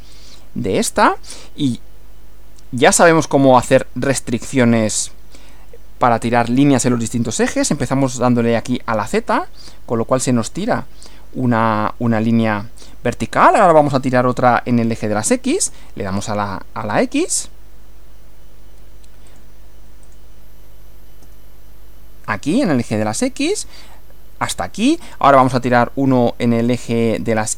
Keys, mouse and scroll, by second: 0.2 click, 2.9 click, 3.7 click, 8.6 z, 12.8 click, 15.6 x, 19.3 click, 20.0 click, 21.2 x, 24.5 click, 26.7 click.